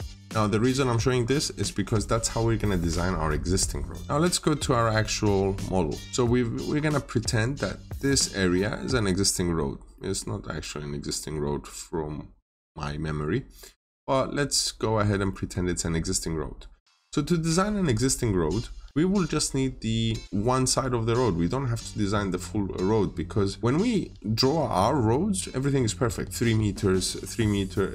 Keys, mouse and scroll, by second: 1.0-3.0 scroll down 1, 4.0 middle click, 5.4-6.0 scroll up 1, 9.4 scroll down 1, 9.8 middle click, 10.4 scroll up 1, 10.6 scroll down 1, 10.9 middle click, 14.3-15.1 scroll up 1, 15.1 middle click, 23.6 scroll down 1, 23.8 middle click, 24.7-27.9 scroll down 1.